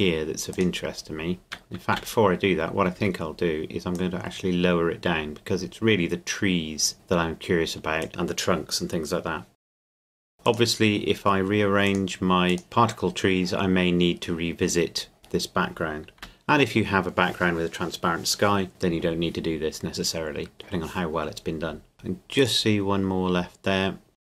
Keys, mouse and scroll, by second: 0.5 click, 1.4 right click, 1.9 a, 3.0 Tab, 4.0 click, 9.5 Caps_Lock, 9.6 Tab, 9.8 c, 15.2 right click, 16.2 x, 21.9 click, 22.4 right click, 24.1 click, 24.2 right click, 24.2 x, 24.3 click.